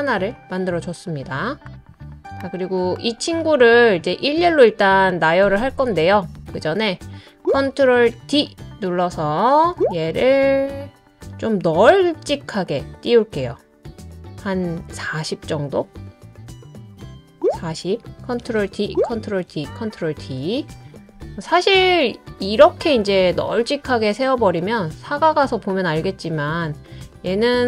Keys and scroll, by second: 1.7 typing, 2.7-3.5 typing, 7.4 ctrl+d, 8.1 super+d, 17.4 ctrl+d, 18.6 super+d, 19.3 super+d, 20.0 super+d.